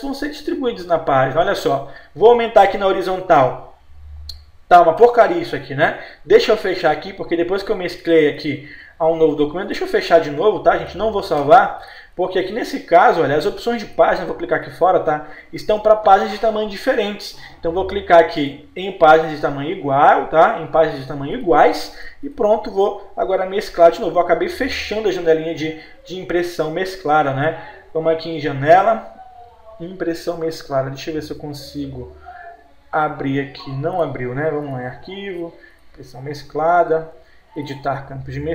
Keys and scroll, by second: 22.9 F4.